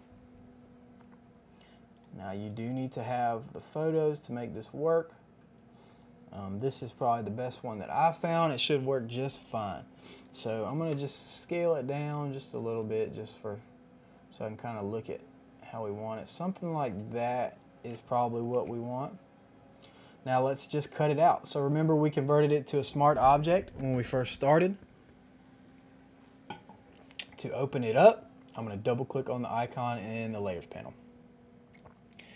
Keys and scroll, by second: 10.7 ctrl+t, 17.3 KP_Add, 18.5 Return.